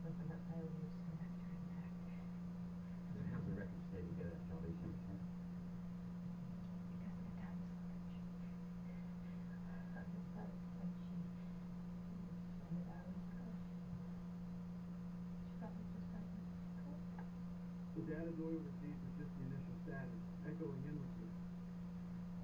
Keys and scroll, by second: 4.4 Right.